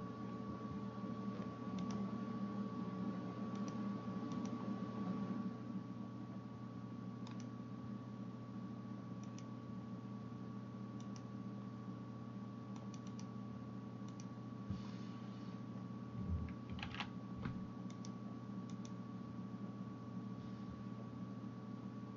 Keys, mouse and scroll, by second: 1.9-4.4 middle drag, 4.4 click, 16.8 ctrl+r, 19.8-22.1 middle drag.